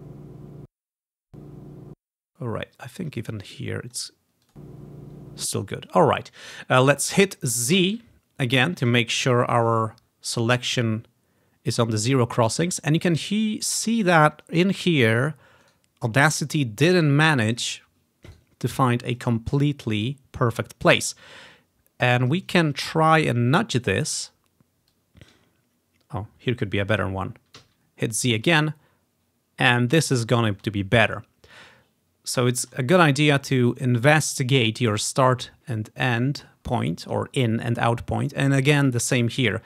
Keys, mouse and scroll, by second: 0.8 space, 1.5 click, 2.1 space, 3.1 click, 5.6 space, 7.8 z, 9.8-11.1 ctrl+scroll up 4, 15.7 right click, 16.0-17.6 right drag, 17.6 click, 18.5 right click, 19.2 click, 23.0-24.4 scroll down 1, 24.4-24.8 scroll down 1, 25.0-26.8 drag, 27.7 z, 28.8-30.3 ctrl+scroll up 3, 30.3-33.8 ctrl+scroll down 6, 33.8-35.0 drag, 35.2-36.6 ctrl+drag, 35.7-38.4 ctrl+scroll up 3, 38.7-39.6 ctrl+scroll down 1.